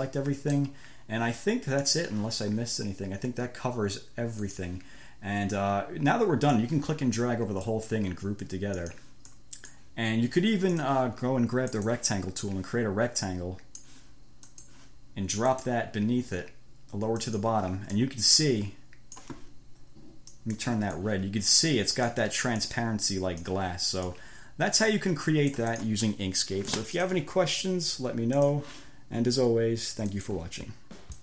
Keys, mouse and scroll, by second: 0.3 click, 2.1 click, 4.7 click, 6.9-8.1 drag, 9.0 click, 9.6 click, 11.1 click, 12.0 click, 12.7-14.3 drag, 14.7 click, 15.8 click, 17.4 click, 18.2-19.7 drag, 20.6 click, 21.4-22.5 drag, 22.9-23.9 drag, 24.3-26.3 drag, 27.2 click, 28.7 click, 30.4 click.